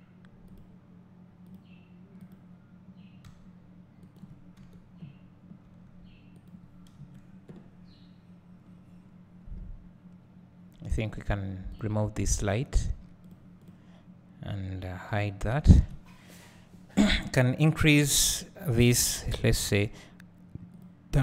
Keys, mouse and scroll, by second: 2.3 click, 3.3 r, 4.2 click, 4.6 KP_7, 5.7 r, 6.5 click, 7.0 KP_0, 7.9-8.7 scroll up 3, 8.7-10.1 scroll down 3, 10.1-11.1 scroll down 1, 11.3 click, 12.4 click, 13.8 click, 15.2 h, 18.2 click, 20.8 click.